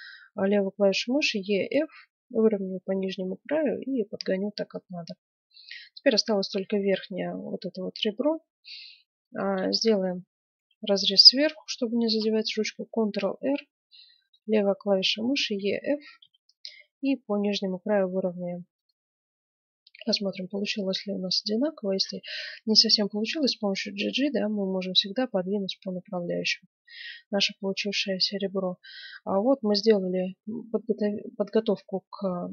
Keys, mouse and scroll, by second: 5.1-7.2 middle drag, 8.0-10.9 middle drag, 12.1 ctrl+r, 19.0-19.9 scroll down 2, 19.0 middle click, 20.2-21.9 middle drag, 21.9 g, 27.0-29.1 middle drag, 29.3-31.1 middle drag.